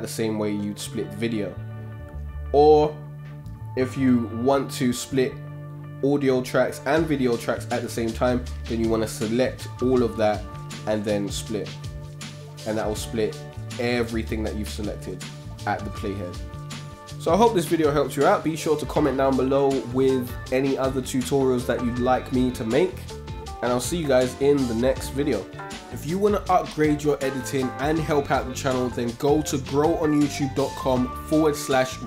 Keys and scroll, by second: 2.0 super+z, 11.1 super+k.